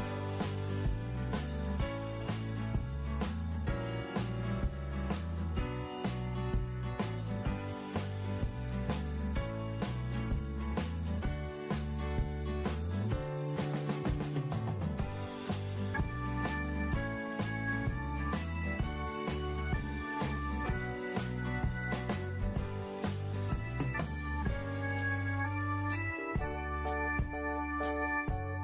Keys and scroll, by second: 3.5 ctrl+c, 3.9 f, 13.8 Up.